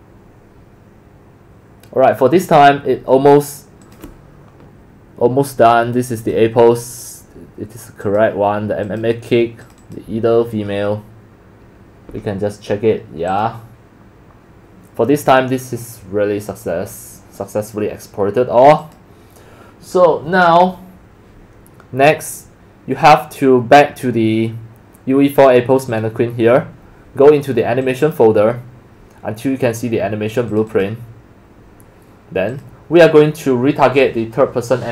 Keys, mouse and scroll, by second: 3.9 click, 6.2 click, 8.0 click, 8.8 click, 9.6 click, 9.8 click, 12.6 click, 13.3 click, 18.8-19.2 drag, 22.5 drag, 25.9 click, 27.8 click, 28.0 click, 30.5 click, 30.7 click, 32.5 click.